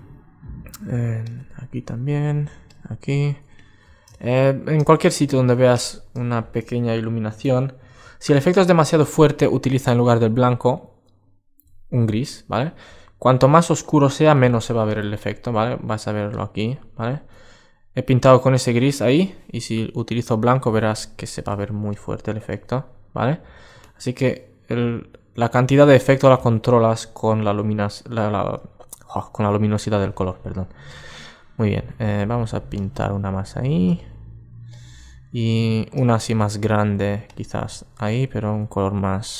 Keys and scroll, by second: 6.9 super+z, 23.2 alt+super+z, 24.7 alt+super+z, 38.2 super+z.